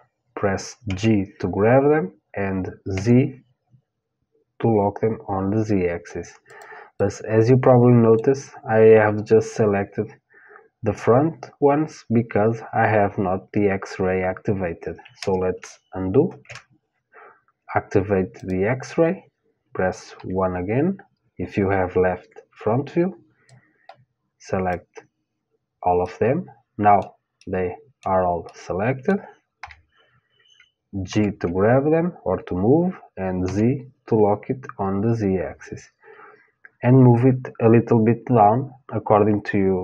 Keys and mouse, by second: 0.5 g, 6.6-8.6 middle drag, 16.0 ctrl+z, 18.0-20.0 drag, 19.8 KP_1, 23.1-25.4 drag, 25.6-30.1 middle drag, 29.2 KP_1, 30.7 g.